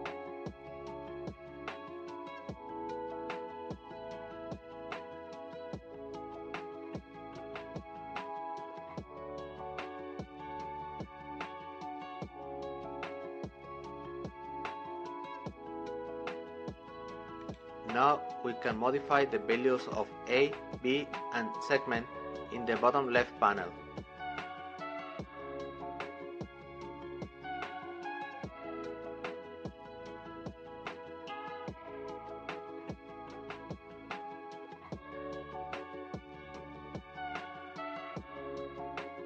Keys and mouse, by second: 0.0 click, 1.7-3.2 drag, 13.1-23.7 drag, 25.1-27.8 middle drag, 29.0-33.0 drag, 34.7-39.2 drag.